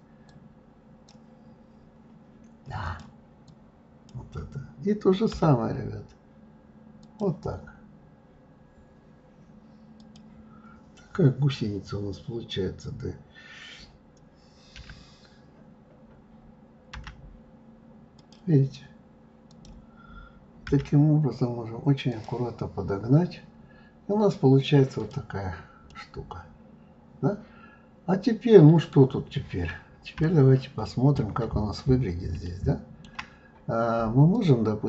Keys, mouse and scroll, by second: 0.3-1.4 drag, 1.4-2.8 scroll up 3, 2.8 click, 3.5-5.3 drag, 5.3 g, 9.9 click, 14.7 d, 19.4-20.7 drag, 20.7 g, 22.8-23.8 scroll down 6, 25.0 click, 25.9-28.9 middle drag, 29.3-30.2 scroll up 4, 30.2-31.5 shift+middle drag, 31.5-32.4 scroll up 2, 32.4-34.3 shift+middle drag, 34.3-34.8 drag.